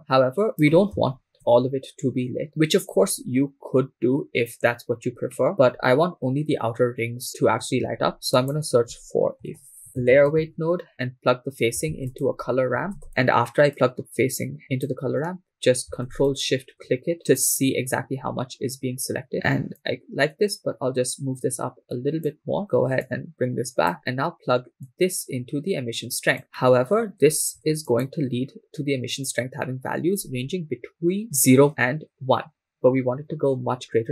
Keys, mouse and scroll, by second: 2.5 shift+middle click, 5.3 middle click, 7.8 shift+a, 10.9 BackSpace, 11.9 shift+a, 13.8-14.9 drag, 16.5 ctrl+shift+click, 19.3 scroll up 4, 19.8-22.3 drag, 22.6 click, 22.6 scroll down 3, 23.0 click, 24.0 scroll down 1, 24.9-26.4 drag, 26.6 middle click, 28.1 ctrl+shift+click.